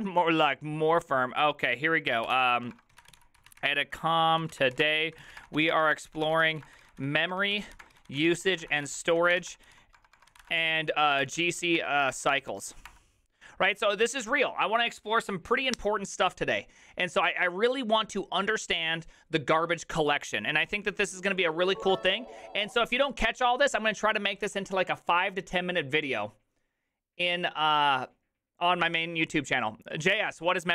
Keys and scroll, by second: 3.6-13.4 typing.